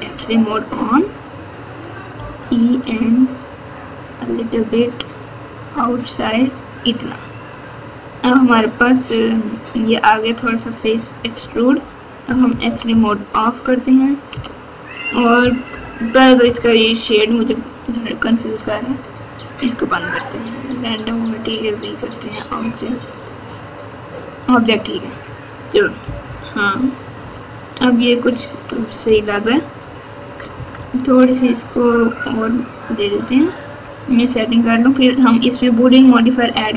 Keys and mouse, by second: 0.2 alt+z, 2.1 e, 9.7 click, 11.3 alt+z, 12.2 KP_2, 12.4 KP_2, 12.7 KP_2, 12.9 KP_2, 14.3 KP_2, 15.7 KP_8, 19.0-24.6 drag, 26.0 KP_4, 26.2 KP_4, 27.2 KP_2, 29.0 ctrl+KP_4, 29.5 ctrl+KP_4, 29.6 ctrl+KP_4, 29.7 ctrl+KP_4, 29.7 ctrl+KP_4, 30.5 KP_Add, 30.7 KP_Add, 33.2 middle click.